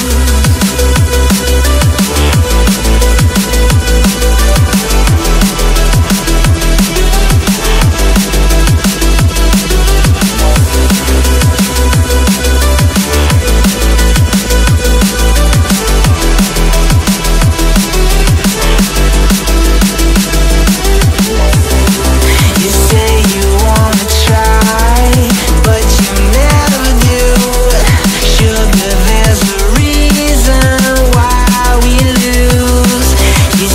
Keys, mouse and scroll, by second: 2.6 ctrl+z, 5.6-7.8 typing, 10.2 alt+scroll down 1, 10.3 alt+scroll up 1, 12.6-14.3 scroll down 1, 14.4-15.3 typing, 19.9 double click, 20.5 Right, 20.6-23.4 typing, 27.2-30.1 typing.